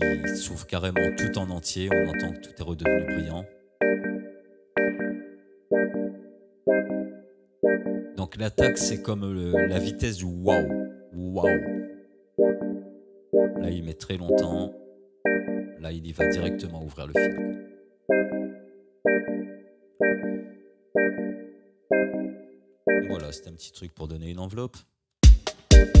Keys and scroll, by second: 23.1 space, 25.2 space.